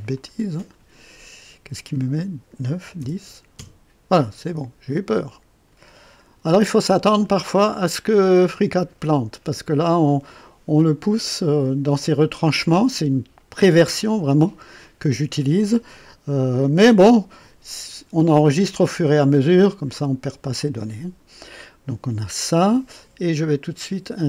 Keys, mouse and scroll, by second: 0.1 click, 2.8 KP_1, 3.0 KP_0, 3.5 KP_Enter, 6.4-8.7 drag.